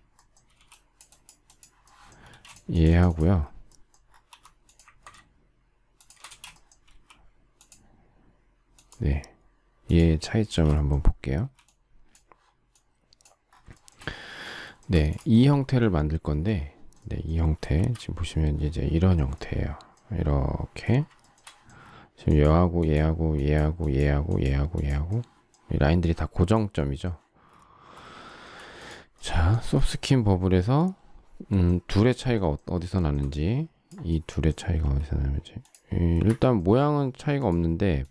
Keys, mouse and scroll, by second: 0.5 e, 2.2 space, 4.3 m, 5.9 shift+click, 6.2 space, 6.9 q, 10.4 space, 11.4 e, 13.7 shift+middle click, 14.6 shift+middle click, 14.9 space, 17.7 shift+c, 21.2 shift+middle click, 28.2 shift+middle click, 33.0 shift+middle click, 34.8 s, 36.2 Escape.